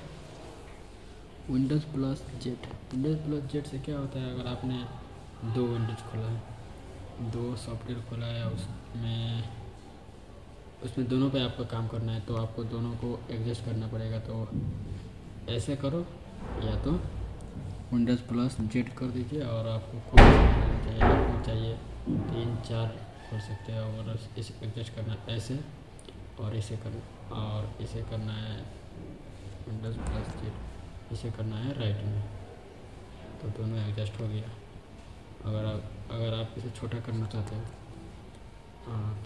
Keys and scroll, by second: 2.5 super+z, 18.5 super+z, 30.0 super+z, 37.3 super+z.